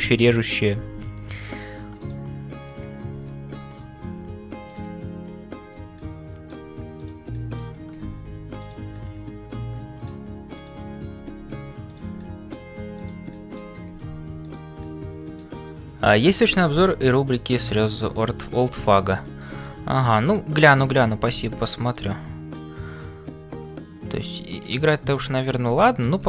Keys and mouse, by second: 0.0-26.2 typing, 0.1 click, 6.0 middle click, 7.0 click, 7.4 middle click, 8.9-10.2 middle drag, 10.6 click, 12.2 middle click, 13.4 middle click, 14.8 middle click, 18.2 click, 19.3 middle click, 20.3 alt+click, 20.8 shift+middle click, 22.5-24.6 middle drag, 24.9 shift+middle click, 25.4 middle click.